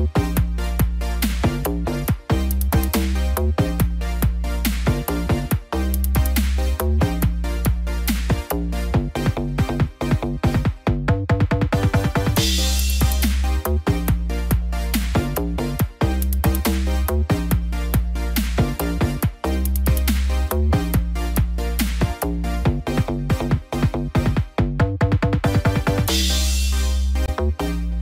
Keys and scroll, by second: 7.9 ctrl+=, 16.6 ctrl+=, 26.1 ctrl+-, 26.7 ctrl+0.